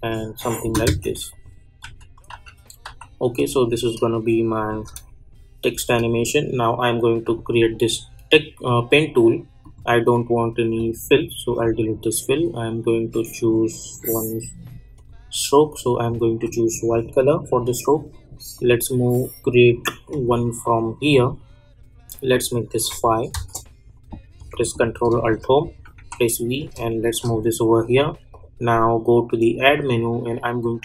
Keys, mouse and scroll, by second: 1.3 click, 1.8 u, 2.3 u, 2.8 u, 3.3-4.7 drag, 4.7 space, 7.2 click, 9.6 click, 14.9 click, 22.3 click, 23.3 Return, 25.1 ctrl+alt+Home, 25.9 v, 26.5-28.3 drag, 28.3 click.